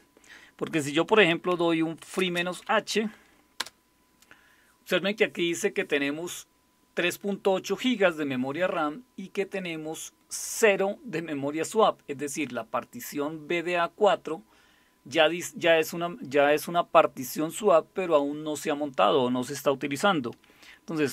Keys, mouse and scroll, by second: 0.8-3.2 typing, 3.6 Return.